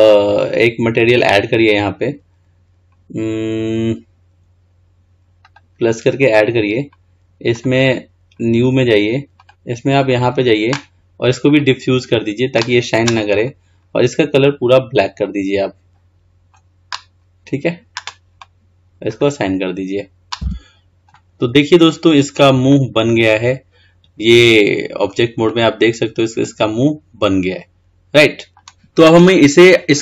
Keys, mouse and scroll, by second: 5.7-9.3 drag, 10.2-13.3 drag, 13.5 click, 19.3 click, 20.6 Tab, 21.3-28.6 middle drag.